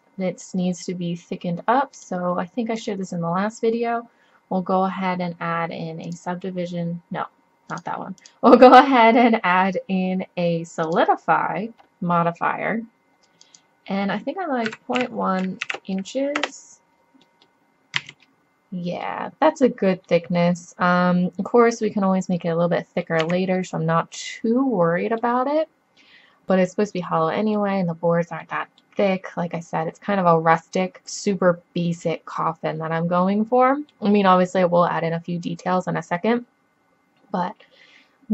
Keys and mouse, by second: 2.0-4.7 drag, 4.7-6.8 middle drag, 7.7-10.1 drag, 13.5-14.6 drag, 18.0 z, 21.8-22.8 middle drag, 23.2 z, 25.0 click, 25.8 click, 26.6 middle click, 27.4-28.4 middle drag, 28.7-30.3 middle drag, 31.0 middle click, 35.7 middle click, 37.5-38.3 middle drag.